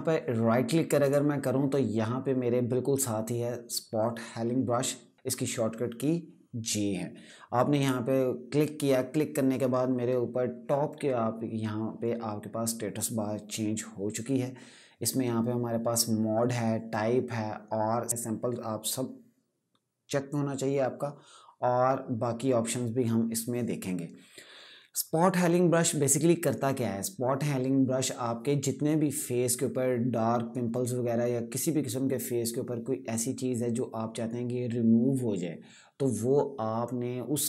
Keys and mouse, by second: 7.5 click, 18.1 click.